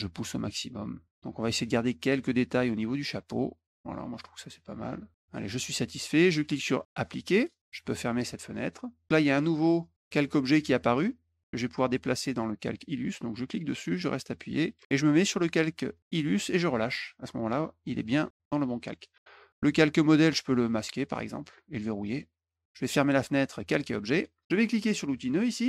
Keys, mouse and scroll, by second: 0.2-5.3 drag, 7.3 click, 8.6 click, 9.3 click, 10.1 click, 13.3-16.4 drag, 19.1 click, 21.4 click, 22.0 click, 24.3 click.